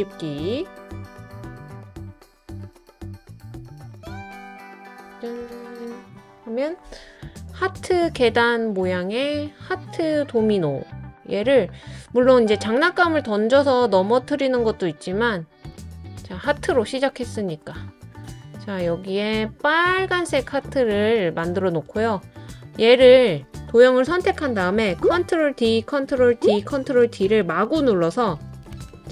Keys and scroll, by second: 4.0 BackSpace, 5.5 Left, 5.6 Left, 5.6 Left, 5.7 BackSpace, 5.8 Left, 6.0 Left, 7.1 BackSpace, 25.1 super+d, 26.1 super+d, 26.8 super+d, 27.4 super+d, 27.9 super+d, 28.4 super+d, 28.7 super+d.